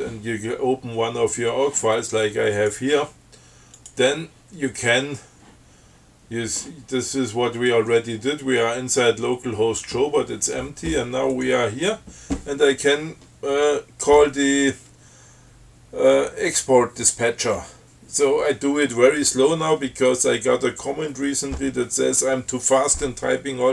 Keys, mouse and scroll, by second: 2.8 click, 4.0 click, 11.6 click.